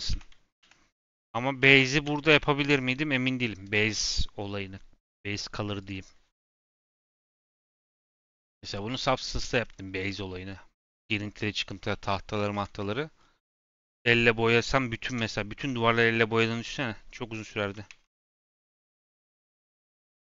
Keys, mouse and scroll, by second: 0.1 ctrl+z, 0.6 ctrl+z, 1.6 ctrl+z, 5.8 click, 6.3 Tab, 6.5 scroll down 5, 6.7 z, 7.2 click, 7.5-8.3 scroll up 9, 7.8 middle click, 8.3 shift+middle click, 8.6 click, 8.9 g, 9.5-10.0 scroll up 1, 10.0 scroll down 3, 10.3 middle click, 10.7-11.4 scroll up 8, 11.4-12.2 scroll down 4, 11.9 middle click, 12.5 shift+middle click, 13.1-14.0 scroll down 3.